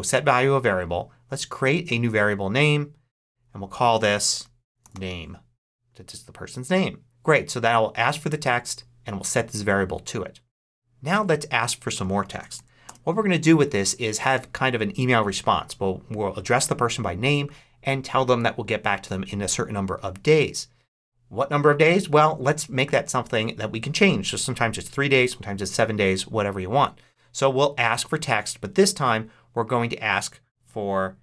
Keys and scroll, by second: 4.3-5.3 typing, 12.1 a, 12.5 k, 12.8 space.